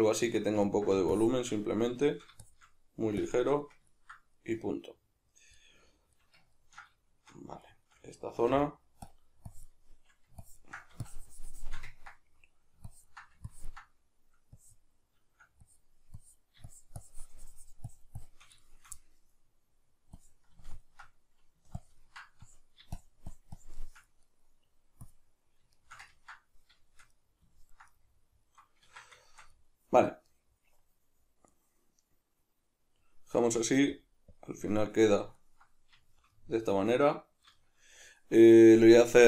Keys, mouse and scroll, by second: 1.2 shift+click, 1.7 middle click, 2.4-3.6 shift+drag, 3.6-7.3 middle drag, 7.6-9.1 shift+middle drag, 8.5 f, 9.5-18.6 drag, 18.6-20.1 shift+middle drag, 20.1-24.2 drag, 24.2 middle click, 25.0 click, 25.7-33.9 shift+middle drag, 28.8 Tab, 33.9-35.0 drag, 35.0-39.2 middle drag.